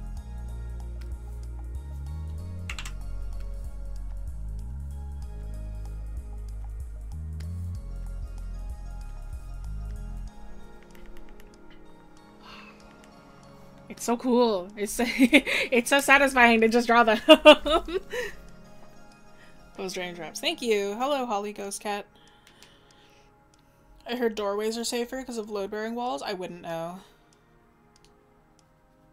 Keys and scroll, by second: 13.5 scroll up 1, 14.9 scroll up 1, 16.7 scroll down 1.